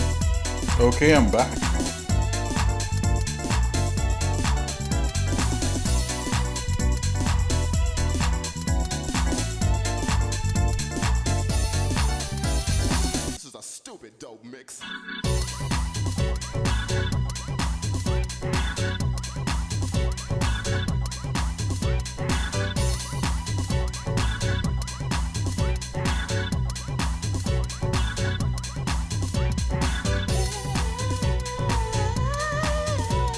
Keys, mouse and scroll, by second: 14.9 shift+middle click, 15.8 middle click, 16.4 shift+middle click, 17.4 shift+middle click, 18.1 ctrl+Tab, 18.9-20.1 shift+middle drag, 20.2 shift+middle click, 21.7 KP_Divide, 22.5 shift+middle click, 23.1 click, 23.6 shift+middle click, 24.3 middle click, 25.8 click, 26.8 shift+middle click, 27.3 Tab, 28.8 Tab, 29.6 click, 30.0 Tab, 30.9 shift+middle click, 31.9 KP_Divide, 33.0 shift+middle click.